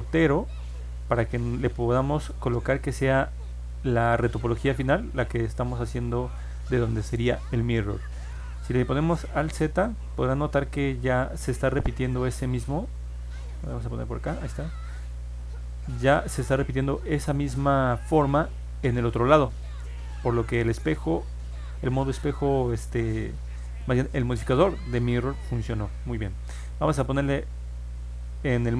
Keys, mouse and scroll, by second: 0.0 click, 4.4 click, 9.2 alt+z, 10.7 click, 13.1 ctrl+Tab, 14.6 click, 21.8 scroll down 1, 22.4 scroll up 1.